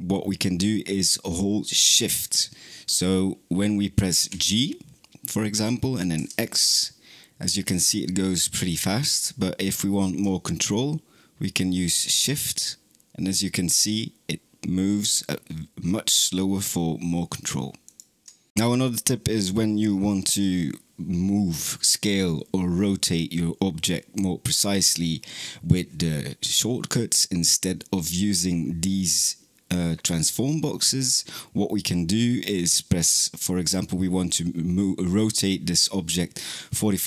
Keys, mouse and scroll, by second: 4.0 g.